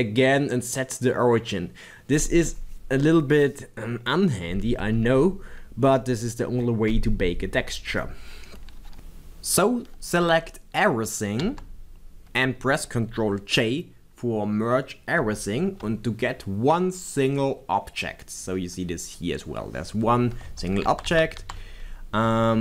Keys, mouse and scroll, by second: 8.9 click, 11.4 a, 15.2 ctrl+j, 20.5 b, 22.3 Tab.